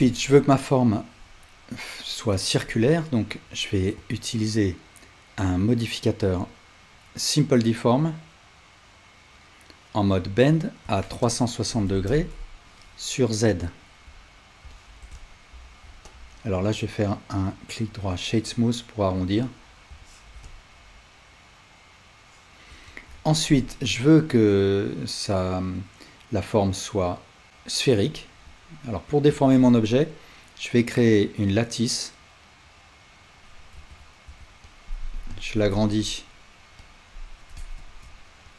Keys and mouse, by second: 11.0-13.6 drag, 14.3-16.2 alt+drag, 16.9-19.9 right drag, 19.3-19.9 alt+drag, 19.9-22.7 ctrl+alt+middle drag, 29.4 shift+a, 33.8 alt+z, 34.3 s, 34.7-38.5 right drag, 35.0 s, 37.8 shift+s.